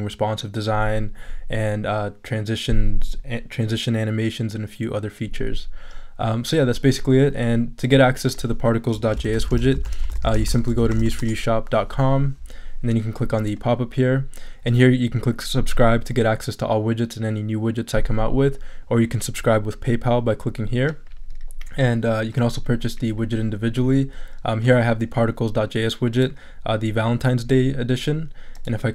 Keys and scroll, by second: 8.9-11.5 typing.